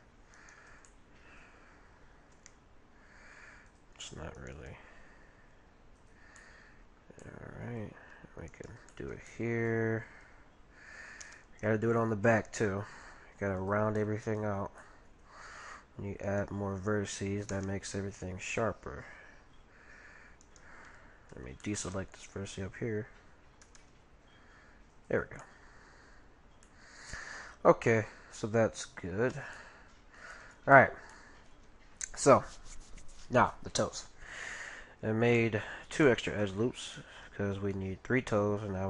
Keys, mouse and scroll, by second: 0.9-2.7 middle drag, 2.4 g, 4.4-6.0 right drag, 4.6 g, 6.2 right click, 6.4-11.0 middle drag, 8.5-10.2 right drag, 11.2 g, 14.0 middle click, 14.6-16.4 middle drag, 16.2-18.0 right drag, 17.5 g, 21.3 b, 23.6 g, 25.2-29.5 middle drag, 29.3 a, 29.7-31.1 middle drag, 31.6-32.9 middle drag, 34.8-35.4 scroll up 1, 35.4-38.8 middle drag.